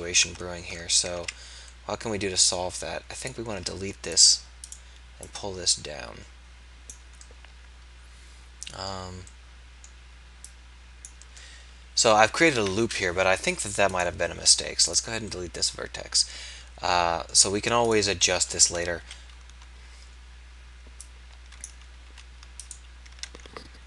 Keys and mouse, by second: 0.3 Tab, 1.1 z, 3.6 x, 4.6 click, 10.5-13.9 drag, 14.4 x, 19.1 KP_3, 21.7 click, 22.1 s.